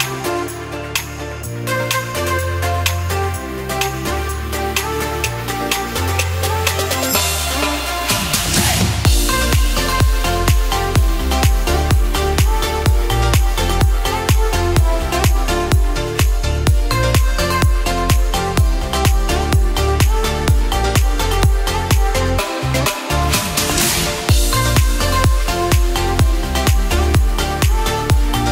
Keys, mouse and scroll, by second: 0.1-0.9 scroll up 1, 1.1 click, 3.6 scroll up 1, 4.8 click, 4.9-5.6 scroll up 1, 6.1 click, 6.7-7.2 scroll up 1, 8.4 alt+click, 11.4 click, 12.0 alt+click, 13.0 scroll down 1, 13.9 scroll up 1, 14.4-14.7 scroll down 1, 14.7 scroll up 1, 16.3 click, 18.5 ctrl+KP_Add, 21.0-21.6 ctrl+z, 22.0 ctrl+z, 22.2 ctrl+z, 23.7 alt+click, 26.2 KP_Decimal, 27.3 click.